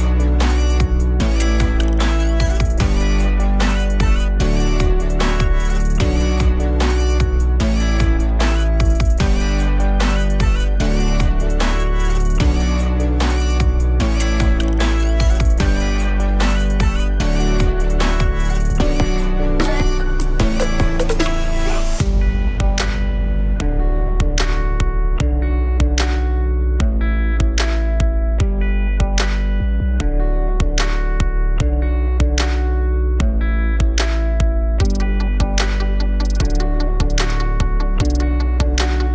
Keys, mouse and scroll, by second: 2.7-4.1 drag, 4.1-4.5 scroll up 1, 4.5 Tab, 6.0-6.5 scroll up 1, 6.5 2, 6.8 click, 7.1 alt+shift+click, 7.3 alt+shift+click, 7.8 alt+shift+click, 8.6 ctrl+b, 12.5 Tab, 12.6-13.1 scroll down 1, 13.1-13.6 alt+drag, 13.7-14.1 scroll down 1, 14.1-14.5 alt+middle drag, 14.5-15.0 scroll up 3, 15.0-15.5 alt+drag, 15.5-15.8 alt+middle drag, 15.8 scroll up 1, 16.1-17.1 alt+drag, 17.9 KP_1, 18.2 Tab, 18.7 alt+middle click, 19.0-19.4 scroll up 4, 19.4 z, 19.7 alt+middle click, 20.1-21.3 scroll up 1, 21.3 click, 21.6 alt+middle click, 22.3 1, 23.4 click, 26.2 click, 28.1 g, 29.4 Tab, 29.8-30.2 scroll down 4, 30.2 alt+click, 31.0-31.7 scroll down 4, 31.7 scroll down 1, 31.8 click, 32.7 click, 33.1-33.4 scroll down 2, 33.4 click, 33.8-34.1 alt+middle drag, 34.1-35.3 scroll down 1, 35.3-39.1 alt+middle drag.